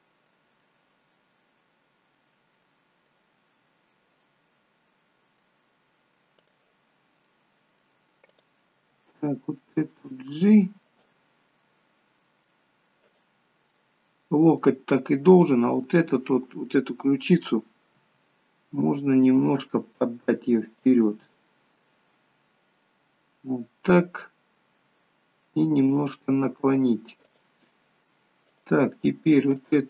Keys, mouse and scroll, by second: 0.5 middle click, 6.5 click, 6.9-8.3 scroll up 3, 7.2 middle click, 8.3 click, 8.8 g, 11.5 middle click, 13.1 click, 13.7 middle click, 15.4 click, 16.1 middle click, 18.1 r, 21.1 middle click, 24.8 r, 27.7 middle click, 28.6 click, 29.6 click.